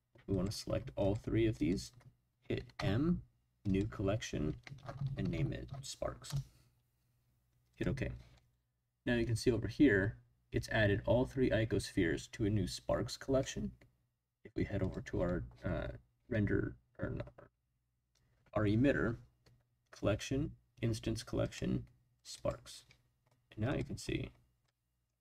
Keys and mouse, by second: 0.3 click, 1.0 shift+click, 1.6 shift+click, 2.7 m, 14.8 click, 21.5 click, 23.7 click, 24.6-25.0 middle drag.